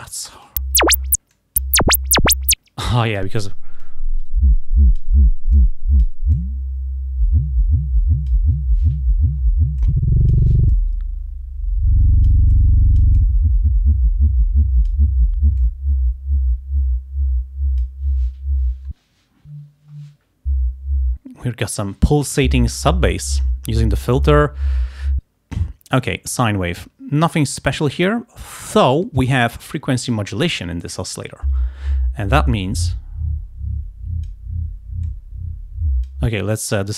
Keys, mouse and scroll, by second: 0.0 click, 1.4 click, 3.0 click, 3.9-5.3 drag, 5.6 click, 6.4-8.6 drag, 9.8 click, 10.8 click, 11.6 click, 13.9 click, 14.9 click, 15.7-18.1 drag, 26.1 click, 28.8 click, 32.4-34.5 drag, 35.1-36.3 drag, 36.7-36.9 drag.